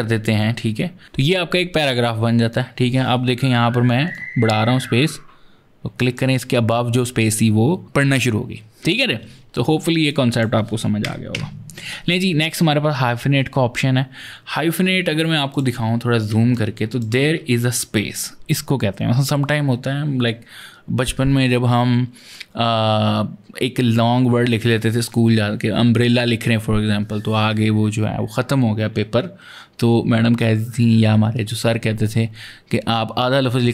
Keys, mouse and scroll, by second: 3.9 click, 9.9 click, 10.9 KP_0, 11.1 Return, 15.3 click, 16.2 ctrl+space, 16.3 ctrl+click, 16.7-17.0 ctrl+space.